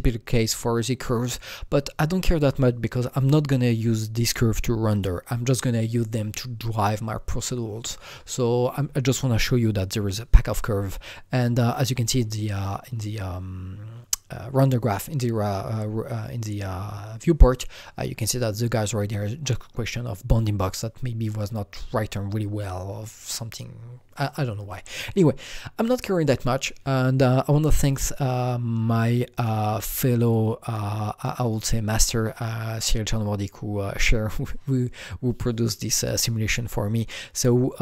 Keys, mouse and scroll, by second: 27.7 click, 28.7 Delete, 29.4 click, 29.7 Delete, 30.3 click, 31.4-34.0 drag.